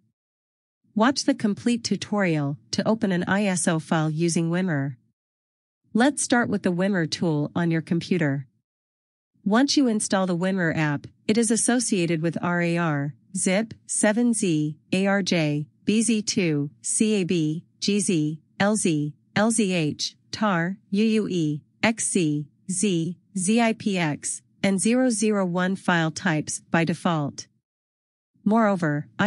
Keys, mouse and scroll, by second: 4.4 click, 16.0 click.